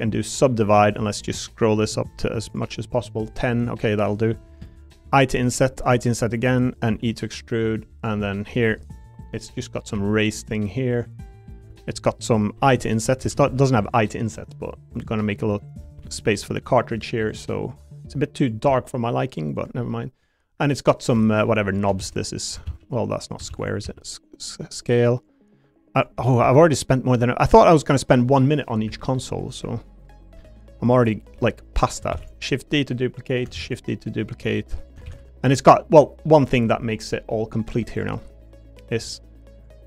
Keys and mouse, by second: 2.0 click, 5.2 i, 5.8 i, 6.6 click, 6.9 e, 8.0 click, 8.2 middle click, 8.7 3, 8.9 click, 9.6 click, 9.9 e, 12.5 i, 13.0 click, 13.2 s, 13.5 y, 15.0 click, 15.2 s, 15.9 x, 17.2 click, 18.0 click, 18.7 e, 19.5 click, 19.8 middle click, 21.2 shift+middle click, 22.0 shift+d, 22.6 ctrl+z, 23.2 click, 23.5 shift+d, 23.8 s, 24.7 click, 25.3 click, 26.1 s, 26.4 y, 27.1 click, 28.9 e, 29.5 click, 30.0 click, 30.3 l, 31.7 click, 32.1 shift+d, 32.5 click, 33.5 shift+d, 35.0 shift+d, 36.0 click, 37.3 middle click, 37.6 3, 37.9 click, 38.5 shift+click, 39.0 middle click.